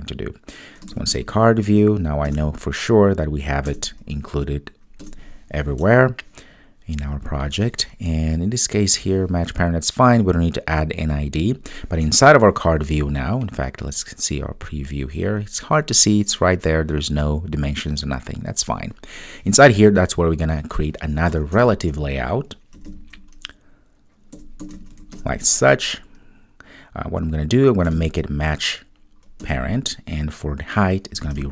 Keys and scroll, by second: 2.3 Return, 25.2 Return.